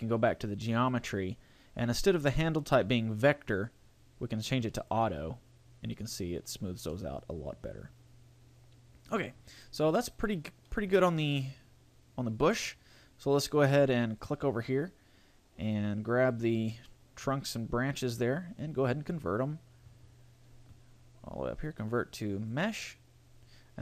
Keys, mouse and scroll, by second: 0.1 click, 3.1 click, 6.5-7.1 scroll down 3, 6.9 middle click, 9.7-11.1 scroll down 1, 11.1 shift+middle click, 11.4 middle click, 14.2 right click, 16.3 right click, 16.8 middle click, 18.7 click.